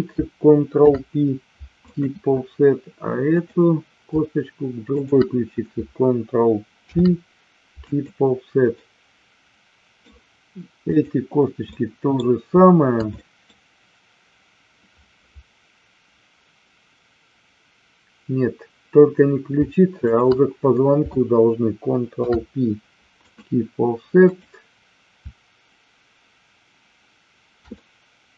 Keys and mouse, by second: 0.8 ctrl+p, 3.3 click, 4.9 shift+click, 6.9 ctrl+p, 8.6-9.9 middle drag, 10.8 click, 11.6 middle click, 13.0 middle click, 19.9 shift+click, 22.0 ctrl+p, 24.2 click, 27.6-28.3 middle drag.